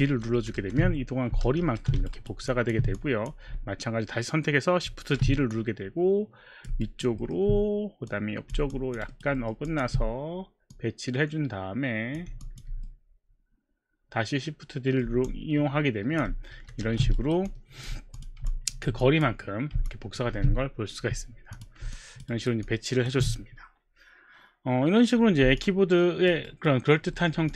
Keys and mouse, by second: 0.0 shift+d, 0.4 shift+d, 0.6 shift+d, 1.4 shift+d, 2.1 alt+right click, 2.7 alt+click, 2.7 alt+right click, 3.0 click, 4.8 shift+d, 5.5 click, 6.8 alt+right click, 7.3 alt+middle click, 8.1 click, 8.7 alt+click, 9.0 alt+right click, 9.4 alt+middle click, 9.6 alt+click, 10.8 click, 12.4 alt+click, 12.8 middle click, 15.3 alt+click, 16.5 shift+d, 16.9 shift+d, 19.1 click, 19.5 click, 20.4 q, 21.6 click, 22.3 alt+right click, 22.7 alt+click, 22.7 alt+right click, 25.6 alt+click, 26.5 alt+right click, 27.2 alt+middle click, 27.5 alt+click.